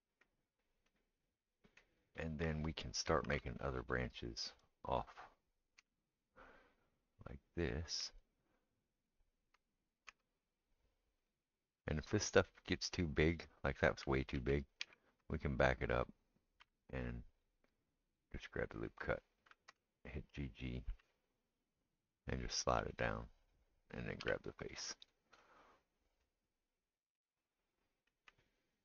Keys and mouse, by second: 3.2 ctrl+r, 5.8 3, 5.9 click, 6.1-25.1 middle drag, 8.9 ctrl+right click, 10.1 s, 14.3 ctrl+z, 14.8 ctrl+z, 16.6 2, 18.0 alt+click, 20.1 g, 24.2 3, 25.1 click, 25.1-28.8 middle drag.